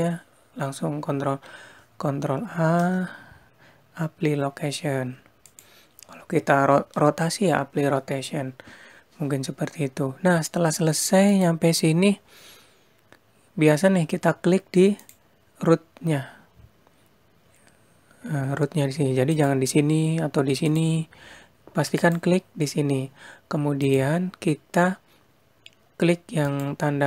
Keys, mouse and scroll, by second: 5.4 ctrl+a, 11.1 click, 14.9 click, 18.7 click, 20.1 click, 23.3 click, 25.9 click.